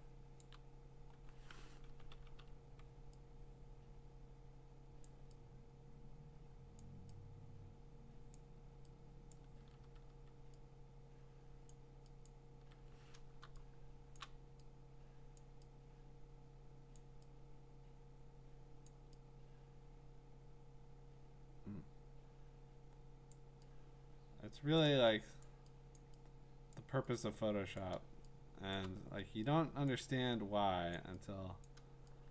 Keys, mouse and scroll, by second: 0.2 click, 0.4 click, 0.5 click, 1.9 ], 2.1 ], 2.4 ], 5.0 click, 6.8 click, 8.3 click, 9.3 click, 9.6 [, 9.9 [, 10.1 [, 11.7 click, 12.3 click, 12.6-14.2 [, 14.2 click, 15.4 click, 16.9 click, 18.8 click, 23.3 click, 24.8 click, 25.4 click, 26.0 click, 26.7 click, 27.8 click, 28.7 click, 29.9 click, 31.0 click, 31.6 click.